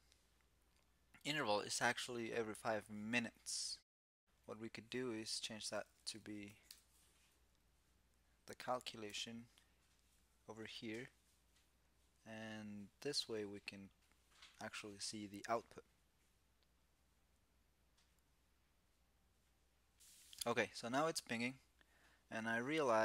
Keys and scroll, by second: 8.8 super+s.